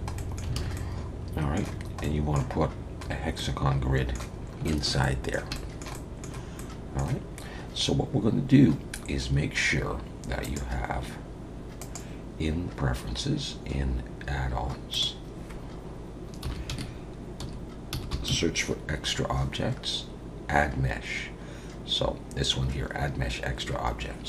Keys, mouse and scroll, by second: 0.1 middle click, 0.5 alt+a, 0.7 middle click, 1.7 scroll down 2, 2.0 middle click, 3.1 scroll down 2, 3.4 middle click, 4.4 scroll up 2, 4.6 shift+middle click, 5.0 middle click, 5.5 shift+middle click, 5.9 middle click, 6.6 middle click, 10.4 click.